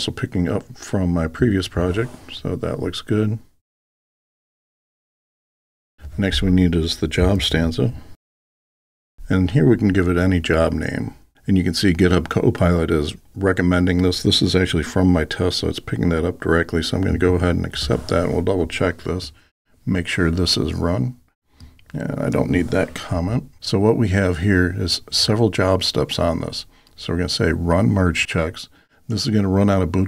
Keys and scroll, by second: 1.4 Tab, 17.2 Tab.